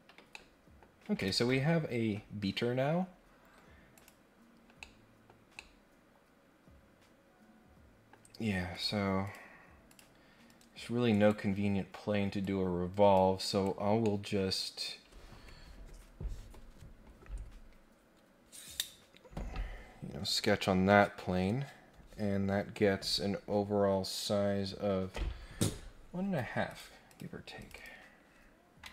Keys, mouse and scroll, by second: 0.2 middle click, 2.8 scroll down 2, 3.0 scroll up 2, 3.9 click, 4.8 middle click, 5.5-8.1 middle drag, 8.2 scroll down 1, 8.4 scroll up 1, 8.7 click, 9.2 click, 9.8 click, 11.1 right click, 12.4 click, 13.5 right click, 14.0-14.3 scroll up 1, 14.4 scroll down 1, 26.7 click, 27.0 click, 27.6 click, 27.7 click.